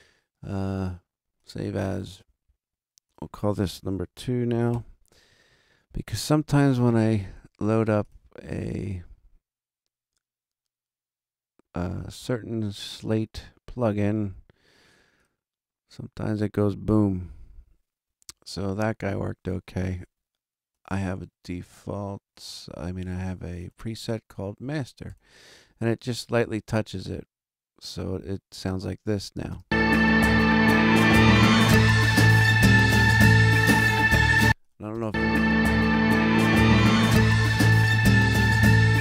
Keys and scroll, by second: 3.9 BackSpace, 4.5 2, 4.7 Return, 29.4 space, 34.3 space.